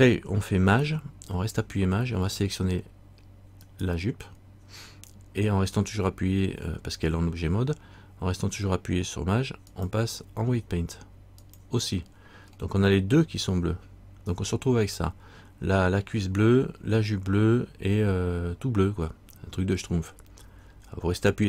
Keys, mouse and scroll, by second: 3.8 shift+right click, 9.9 shift+click.